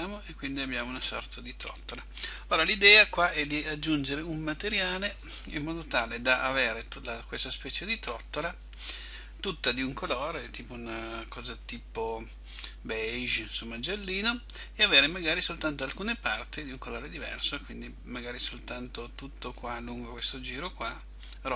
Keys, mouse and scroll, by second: 1.7 click, 18.9 middle click.